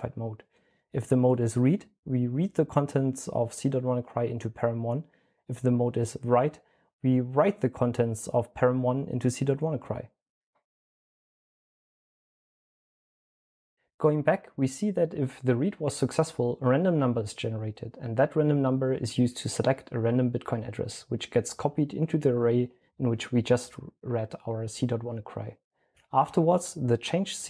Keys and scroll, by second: 9.8-13.7 typing, 16.3-18.2 typing.